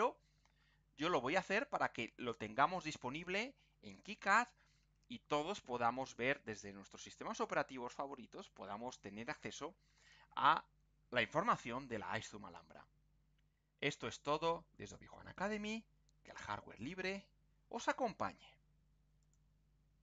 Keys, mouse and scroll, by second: 2.3 click, 19.2 click.